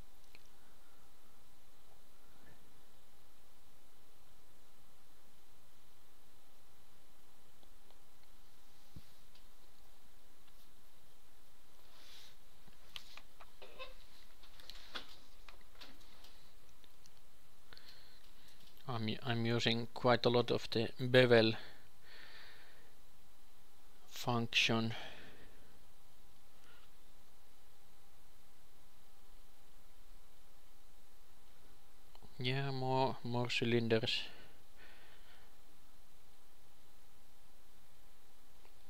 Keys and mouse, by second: 1.4 s, 2.5 g, 4.4 Tab, 5.0 ctrl+r, 5.8 ctrl+r, 7.1-9.6 drag, 7.9 x, 9.6 KP_2, 9.8-12.8 drag, 10.2 f, 13.4 a, 13.6 a, 14.4 ctrl+b, 19.5 Tab, 20.6 ctrl+shift+KP_2, 20.8 ctrl+shift+KP_3, 22.2 ., 23.8 r, 25.3-29.4 drag, 26.2 ,, 28.8 shift+d, 30.1 g, 31.1 shift+d, 31.7 s, 31.7 g, 34.8 shift+d, 36.0 r, 37.9 g.